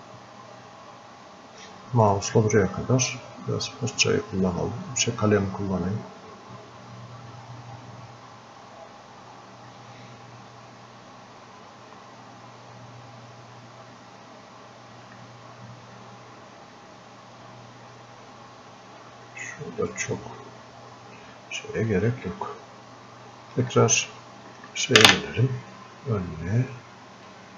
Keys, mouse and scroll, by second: 4.5-6.3 drag, 6.3 click, 7.3-10.0 drag, 10.0 click, 10.9-12.2 drag, 12.2-13.5 drag, 13.5 click, 14.7-21.7 drag, 21.7-24.1 drag, 27.3 shift+Num_Lock.